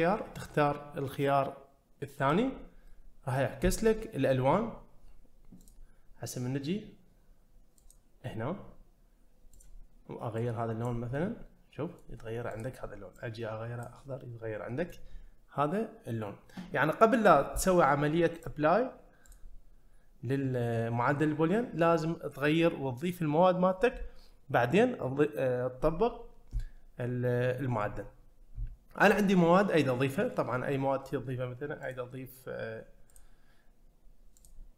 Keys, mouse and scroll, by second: 2.9 middle click, 5.6 click, 7.8 click, 9.5 click, 11.2-12.0 middle drag, 12.5 click, 14.2-14.9 middle drag, 18.4 click, 19.3 click, 30.1 click, 31.8 click, 33.1 click, 34.4-34.7 drag.